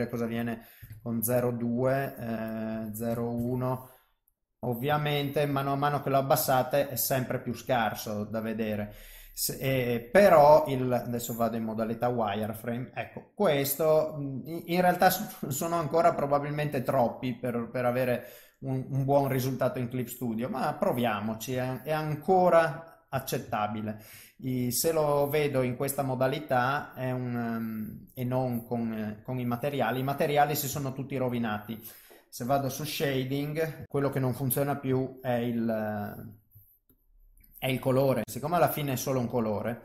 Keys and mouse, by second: 2.5 click, 4.4 middle click, 5.0 ctrl+middle click, 5.7 middle click, 6.6 ctrl+middle click, 7.3 middle click, 9.8 ctrl+middle click, 11.0 click, 11.5 middle click, 19.2 click, 19.6 middle click, 20.7 click, 21.1 middle click, 21.7 ctrl+middle click, 22.2 middle click, 23.5 shift+middle click, 24.2 middle click, 25.0 click, 25.4 middle click, 28.3 click, 28.7 middle click, 30.2 middle click, 30.8 shift+middle click.